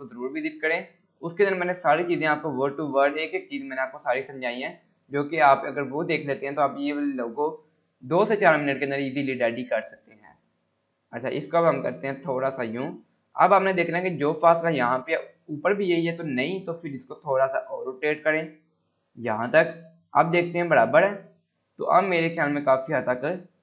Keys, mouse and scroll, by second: 6.0 scroll down 1, 8.9 scroll up 1, 9.3 scroll down 1, 9.6 scroll up 1, 10.5-13.1 drag, 13.1 scroll down 1, 13.5 scroll up 1, 14.8 scroll down 1, 16.1-18.3 drag, 20.6-21.1 scroll up 1, 21.7-23.5 drag.